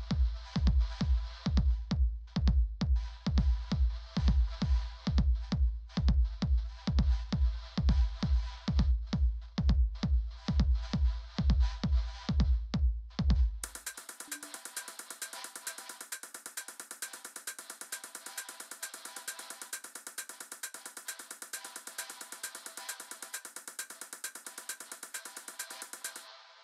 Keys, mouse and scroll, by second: 3.6 click, 6.9-10.0 drag, 16.0 click, 20.1 click, 24.5 click.